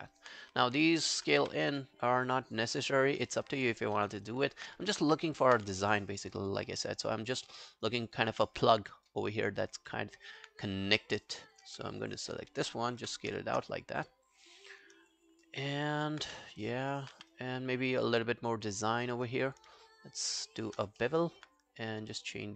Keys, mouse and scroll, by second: 0.0 alt+right click, 1.2-2.0 typing, 1.8 right click, 2.8 alt+scroll down 2, 2.9 alt+click, 3.3 alt+middle click, 3.5 alt+right click, 3.7 alt+click, 4.0 alt+middle click, 4.2 alt+right click, 4.4 alt+click, 5.3 ctrl+i, 5.6 ctrl+scroll down 2, 5.8 alt+middle click, 6.2 alt+scroll down 2, 6.4 alt+click, 6.7 alt+middle click, 6.9 alt+right click, 7.1 alt+click, 7.5 alt+middle click, 7.7 alt+right click, 8.0 alt+click, 8.5 right click, 9.8 right click, 9.9 alt+middle click, 10.2 alt+right click, 10.6 right click, 12.1 shift+click, 12.2 shift+click, 13.0 r, 15.4 alt+scroll down 1, 15.5 alt+click, 15.7 alt+right click, 16.0 alt+click, 16.3 q, 16.6 alt+click, 16.9 alt+right click, 17.2 q, 19.5 double click, 19.8 shift+right click, 21.0 alt+middle click, 21.2 alt+right click.